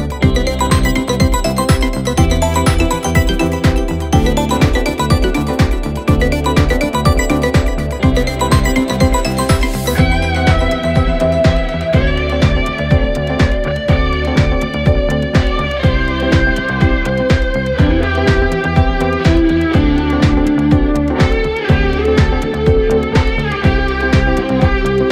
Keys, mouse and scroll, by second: 0.3-1.2 drag, 2.2 click, 3.2 click, 4.8 click, 5.1-6.1 drag, 6.7 click, 7.1 click, 8.4-8.8 scroll down 2, 8.8-9.1 scroll up 2, 9.3 click, 10.1-10.9 scroll down 3, 11.6 click, 13.6-15.4 scroll up 6, 15.4 click, 18.3 click, 18.8-19.4 scroll up 4, 19.9-20.3 scroll down 3, 21.6-24.6 drag.